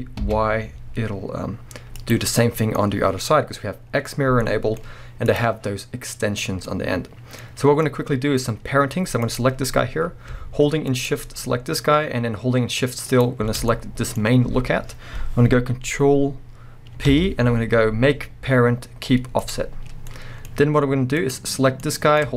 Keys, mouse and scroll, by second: 2.1 click, 2.3-4.2 middle drag, 4.2 scroll down 2, 4.4 middle click, 4.8-5.2 scroll up 2, 5.2 click, 6.5 scroll down 2, 6.6-9.3 middle drag, 7.4-7.8 scroll up 2, 9.3 click, 10.9 shift+click, 13.1 shift+click, 13.7-21.2 middle drag, 17.1 ctrl+p, 20.0 scroll down 2, 20.5-21.2 scroll up 2, 21.2 click, 21.8-22.3 middle drag.